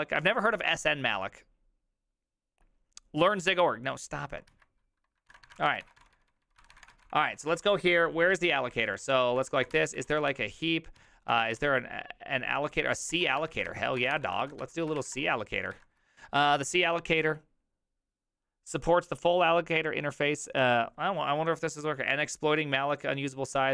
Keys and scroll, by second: 4.5 alt+{, 5.2-12.1 typing, 13.1 ctrl+y, 13.1-15.7 typing.